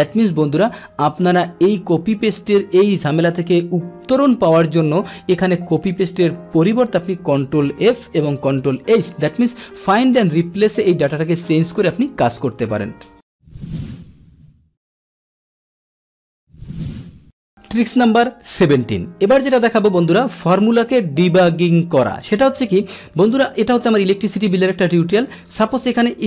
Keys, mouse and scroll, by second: 1.4-17.6 drag, 25.3 click, 25.5 click.